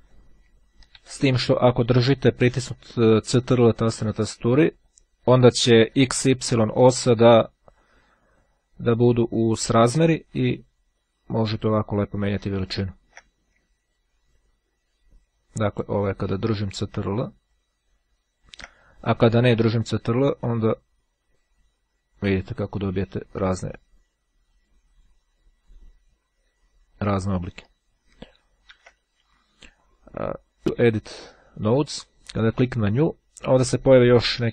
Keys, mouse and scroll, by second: 1.3 ctrl+z, 4.8-13.6 ctrl+drag, 14.0-16.8 drag, 17.2-19.0 drag, 19.8-27.8 drag, 30.6-32.9 drag.